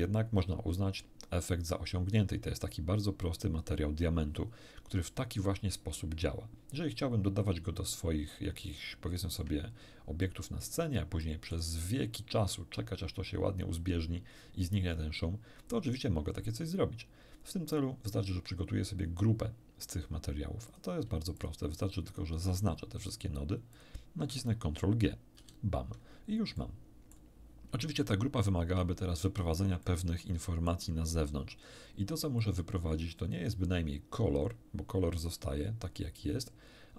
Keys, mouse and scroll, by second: 2.4-3.6 drag, 7.0-7.7 scroll down 4, 8.3 scroll down 2, 8.8 shift+middle click, 10.2 middle click, 11.2 middle click, 20.7 click, 21.4 shift+click, 22.1 shift+click, 23.1 shift+click, 23.7 shift+click, 25.4 ctrl+g, 26.6 ctrl+middle click, 28.0-29.0 drag, 29.8-30.8 middle drag, 32.4-33.6 drag.